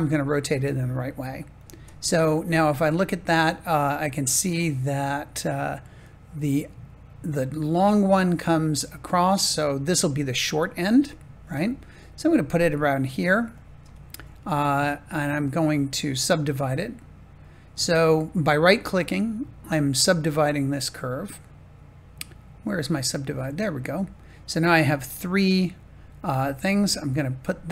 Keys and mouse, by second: 1.5 click, 2.5-3.7 shift+middle drag, 11.4 g, 13.5 click, 13.7 Tab, 16.9-26.4 drag, 26.4 g.